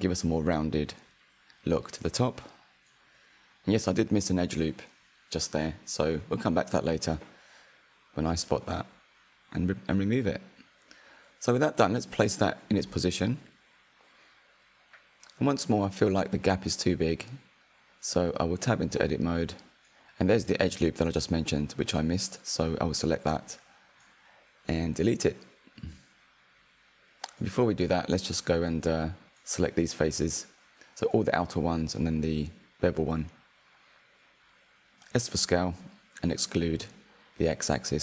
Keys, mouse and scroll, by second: 0.8 click, 1.3-1.7 scroll down 4, 1.7 click, 2.0-4.5 middle drag, 4.5 /, 5.6-7.1 middle drag, 7.1 click, 7.4-9.8 middle drag, 9.8 click, 12.9 click, 13.2-14.6 middle drag, 14.6 scroll up 3, 15.0-17.8 shift+middle drag, 17.8 click, 18.5 Tab, 21.8 click, 22.7-24.7 middle drag, 24.7-27.1 drag, 27.1-28.2 middle drag, 28.2 alt+click, 28.9 middle click, 29.3 ctrl+KP_Add, 29.6 ctrl+KP_Add, 30.1 middle click, 31.5 ctrl+KP_Add, 32.1 click, 32.2-33.1 shift+middle drag, 33.4 s, 37.8 click.